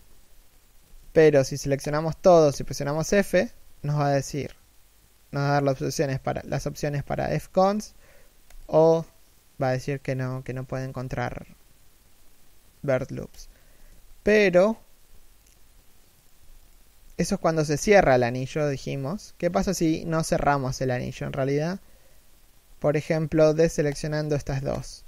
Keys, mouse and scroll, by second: 1.5 alt+right click, 2.2 f, 15.9 right click, 17.8 middle click, 23.6 shift+right click.